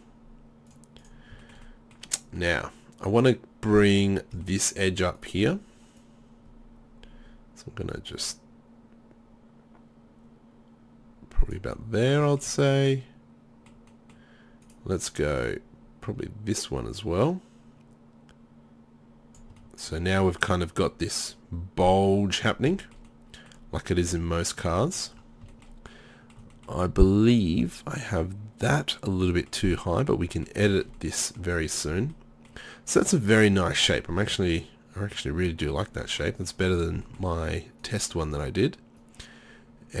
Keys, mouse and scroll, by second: 6.0-11.6 drag, 6.0-11.6 right drag, 11.8-13.3 middle drag, 13.4 middle click, 14.7-19.4 right drag, 15.5-19.4 drag, 20.5 middle click, 21.2 middle click, 27.5-28.8 middle drag, 29.1 middle click, 39.0-40.0 right drag.